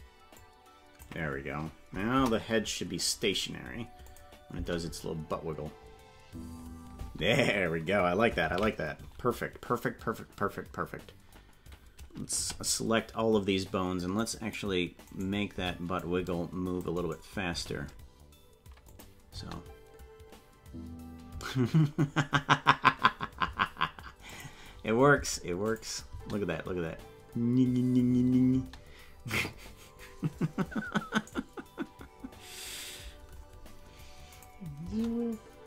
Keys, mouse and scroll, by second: 0.3 click, 2.1 KP_0, 2.7 scroll down 1, 4.1 click, 4.5 space, 7.8 space, 11.2 ctrl+s, 13.0 a, 14.2 click, 15.0 right click, 15.5 c, 17.6 s, 22.5 space, 24.2 click, 25.7 click, 26.1 space, 34.4 click, 34.8 space.